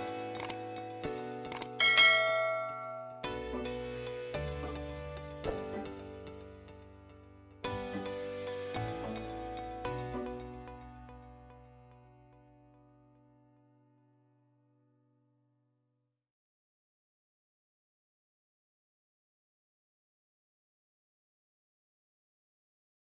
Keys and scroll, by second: 6.4 Escape.